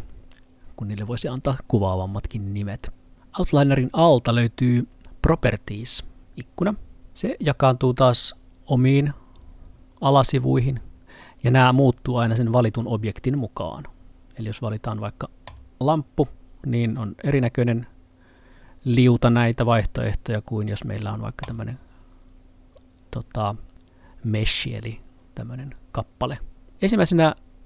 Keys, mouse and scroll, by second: 7.1 click, 15.5 click, 21.5 click.